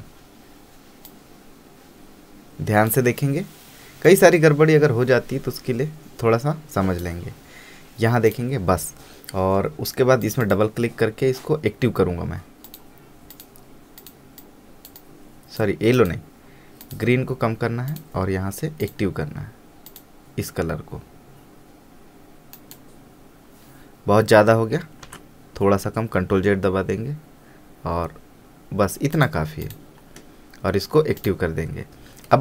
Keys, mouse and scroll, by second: 1.2-8.4 drag, 12.8-16.1 drag, 22.7 click, 25.4 ctrl+z, 29.3 click.